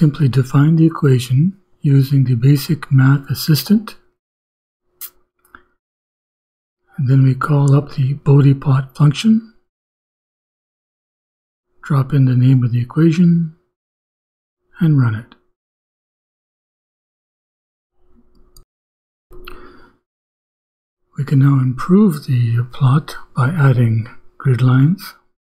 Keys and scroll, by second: 3.0 l, 3.3 Down, 4.4 s, 5.2 shift+=, 5.6 shift+i, 6.3 Right, 7.4-10.6 typing, 7.8 Return, 8.3 shift+Return, 12.4-15.2 typing, 16.7 shift+Return, 20.2 ,, 20.8 Return, 22.0 Return, 22.2-25.5 typing.